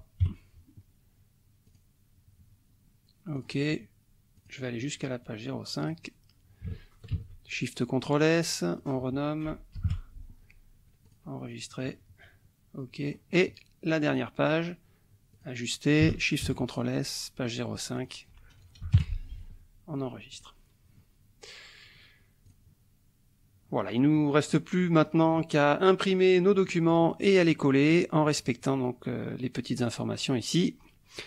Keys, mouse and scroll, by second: 0.2 KP_3, 1.7 click, 3.3 click, 4.4 click, 5.8 click, 7.1 ctrl+shift+s, 8.7 click, 9.7 BackSpace, 9.8 KP_4, 11.1 click, 13.0 click, 14.1 click, 15.3 click, 16.4 ctrl+shift+s, 18.0 click, 18.8 BackSpace, 18.9 KP_5, 20.3 click, 22.4 click, 24.4 click, 25.1 click, 26.0 click, 26.6 click, 27.6 click.